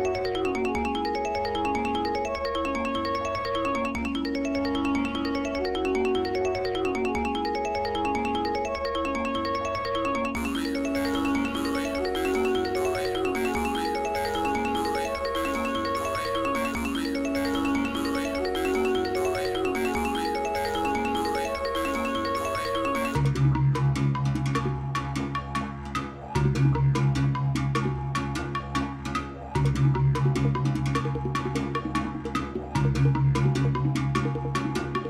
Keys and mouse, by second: 0.2 space, 1.0-1.9 drag, 3.4 space, 4.6 space, 6.3 click, 8.0 k, 9.5 x, 10.4 Page_Up, 10.8-11.5 drag, 12.3 shift+s, 13.6 shift+s, 14.8 space, 19.0 space, 20.5 k, 21.0 ctrl+s, 21.3 space, 22.1 click, 23.0 click, 23.6 click, 24.3 click, 25.0 click, 25.7 click, 26.3 click, 29.8 click, 30.9 click, 31.9 click, 32.7 space, 33.5 click.